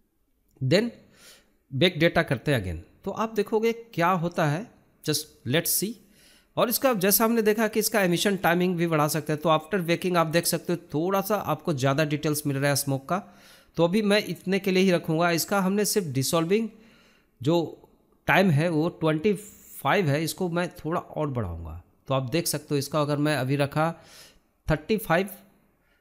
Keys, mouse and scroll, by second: 0.2-5.9 drag, 5.9-7.2 scroll down 2, 7.2-19.2 drag, 19.2-21.6 scroll down 9, 21.6-21.9 scroll down 1, 22.4 scroll up 3, 22.6 scroll down 1, 22.7-24.1 scroll up 2, 24.1-25.1 drag, 25.1-26.0 scroll down 13.